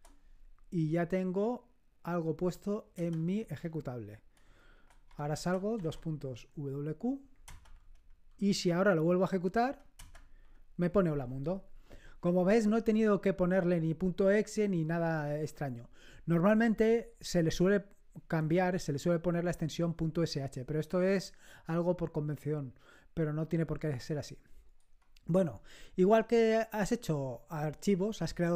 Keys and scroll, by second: 2.9 Return, 5.0 Escape, 5.0-6.2 typing, 7.4 Return, 7.4 Up, 7.6 Up, 9.9 Return.